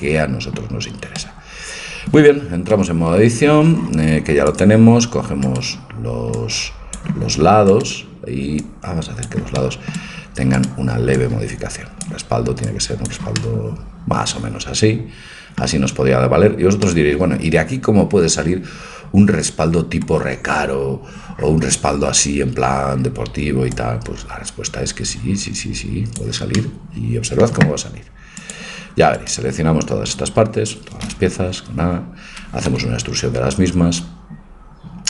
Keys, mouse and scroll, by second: 1.2-3.5 middle drag, 2.8 Tab, 3.5 Tab, 4.6-7.7 drag, 5.5-7.3 right drag, 8.3 right click, 9.5-10.5 drag, 9.7-11.2 middle drag, 11.4-13.6 drag, 11.4-12.4 right drag, 13.4 right click, 13.6-15.3 middle drag, 16.3-17.0 scroll up 1, 17.0-18.7 middle drag, 23.8-25.6 drag, 26.6 middle click, 28.5-30.3 drag, 29.2-31.0 right drag, 31.0 a, 31.3 a, 32.7 e.